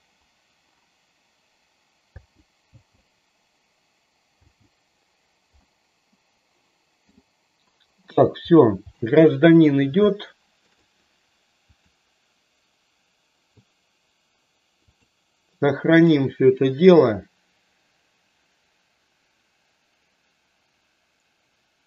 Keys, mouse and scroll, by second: 2.1 space, 2.6 space, 4.3 space, 5.6-7.1 middle drag, 8.0 middle click, 9.0 middle click, 10.1 shift+middle click, 11.7-15.1 drag, 15.8-21.8 drag.